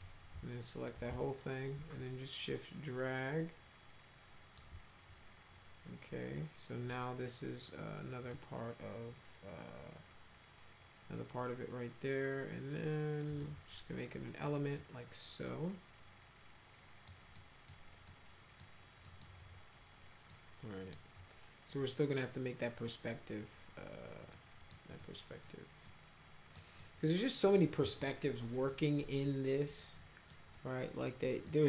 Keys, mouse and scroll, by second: 2.0-4.6 shift+drag, 8.2 click, 13.3 click, 14.8-17.1 drag, 17.4 middle click, 18.1 middle click, 19.0 middle click, 20.3 middle click, 24.3 middle click, 25.0 middle click, 25.9 middle click, 26.8 middle click, 28.7 middle click, 29.3-30.3 middle drag, 30.5 middle click, 31.5 middle click.